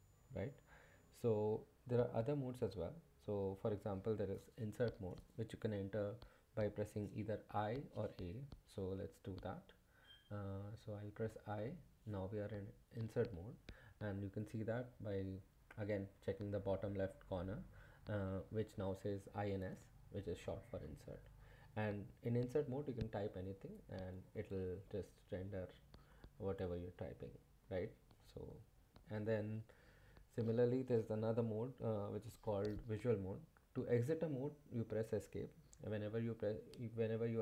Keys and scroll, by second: 11.3 i, 13.4 typing, 22.8-27.4 typing.